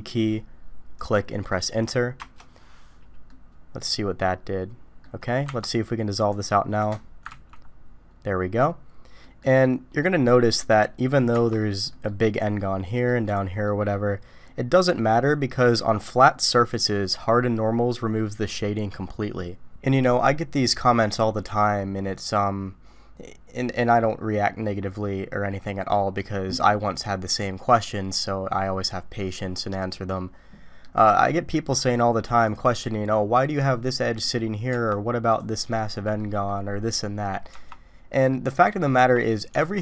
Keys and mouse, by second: 3.3-5.0 middle drag, 5.5 Tab, 6.2 click, 6.9 click, 7.3 ctrl+x, 9.2 click, 10.2 middle click, 11.3 Tab, 11.9 middle click, 12.9 middle click, 13.6 middle click, 14.4-14.9 middle drag, 21.8-24.0 middle drag, 25.5 middle click, 30.8 middle click, 32.4 middle click, 34.2 middle click, 34.7 Tab, 36.0 click, 37.5 Tab, 38.1 middle click, 38.9 Tab, 39.6 alt+a.